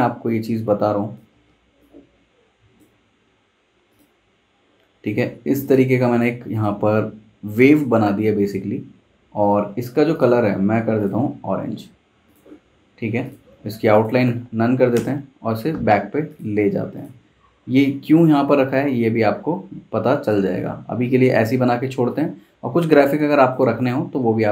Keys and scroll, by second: 1.3 super+z, 8.4 v, 14.9 shift+super+[, 20.5 super+z.